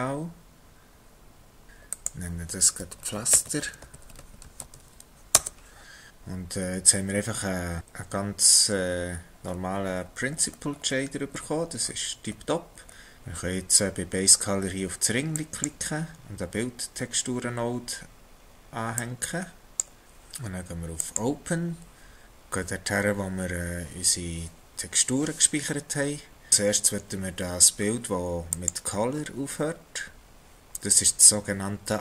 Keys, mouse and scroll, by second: 1.9 Left, 6.1 scroll down 3, 6.7-7.1 scroll down 5, 7.7-8.3 scroll down 6, 10.0-11.4 scroll down 11, 11.9-13.2 scroll up 10, 15.4 click, 21.0 click.